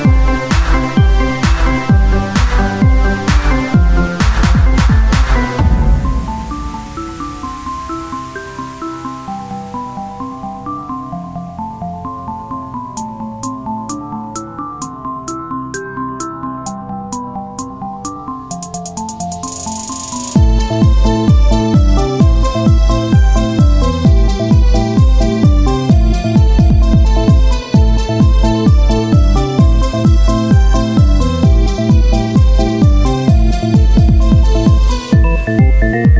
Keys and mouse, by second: 0.7 ctrl+r, 3.2 b, 6.6 x, 8.3-10.4 drag, 10.4 Tab, 13.1 right click, 14.0-16.4 drag, 17.2-18.8 right drag, 18.8 e, 21.1-22.3 drag, 22.0-23.1 right drag, 22.4-23.6 drag, 23.6-25.5 right drag, 25.5 e, 27.8-30.7 drag, 28.8-30.0 right drag, 30.7-31.8 right drag, 31.8 e, 35.6-36.1 right drag, 36.0-36.1 drag.